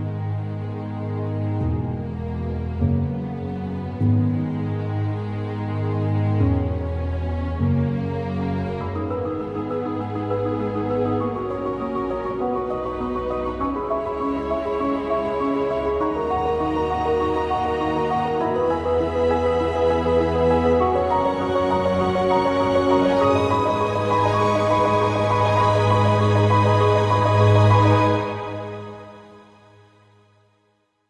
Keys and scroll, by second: 1.7 ctrl+w, 19.8 ctrl+t.